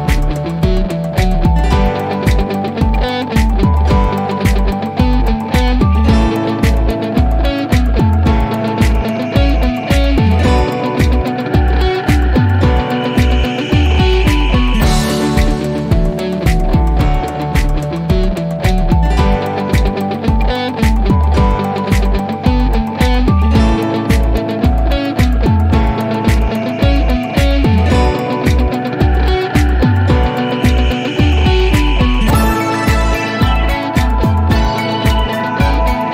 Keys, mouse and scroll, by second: 12.9 F3, 13.0 click, 19.7 click, 22.0 click, 24.4-25.9 scroll down 1, 26.0 click, 29.2 click, 31.0 click.